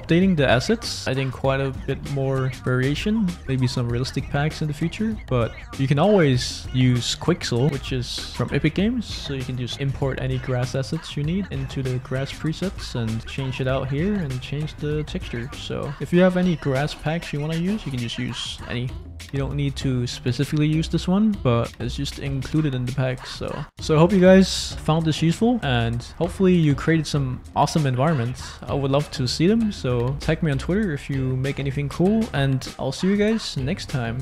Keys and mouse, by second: 1.0 shift+click, 5.6 space, 13.2-14.2 right drag, 14.7 right click, 15.9 middle click, 16.7 middle click, 17.6 middle click, 17.8 click, 18.8 middle click, 19.5 click, 21.3 middle click, 21.6 click, 23.1 click.